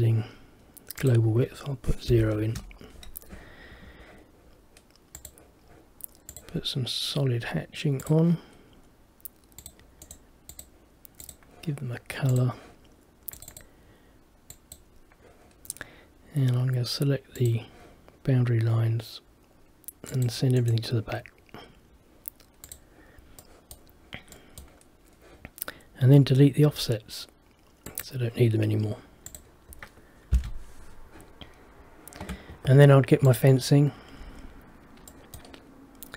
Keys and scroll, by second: 2.4 Return, 3.8 Escape, 30.4 Delete.